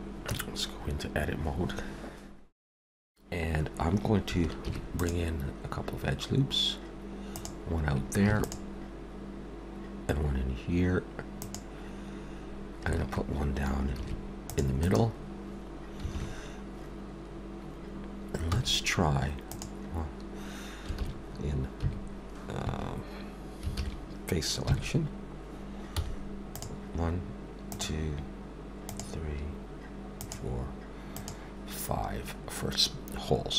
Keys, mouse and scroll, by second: 0.3 Tab, 0.7 scroll up 2, 4.6 ctrl+r, 8.3 ctrl+r, 13.9 ctrl+r, 16.1 alt+a, 18.5 c, 23.7 alt+a, 24.7 3, 25.8 c.